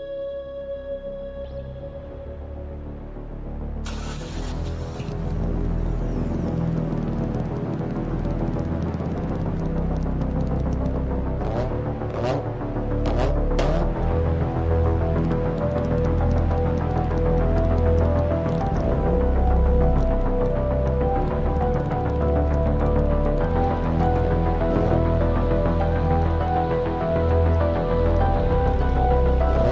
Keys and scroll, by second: 0.5 ctrl+z.